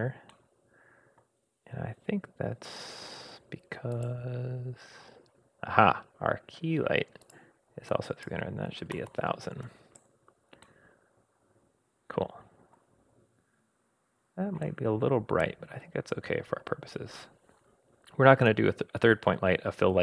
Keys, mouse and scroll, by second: 0.3-1.3 middle drag, 1.3-2.6 scroll down 2, 3.9 click, 7.2-10.1 drag, 9.1 0, 10.6-12.8 middle drag, 12.8-14.1 scroll up 3, 14.1 scroll down 1, 14.2-14.6 scroll down 1, 14.6-17.3 middle drag, 16.7-17.2 scroll down 2, 17.2 scroll up 1.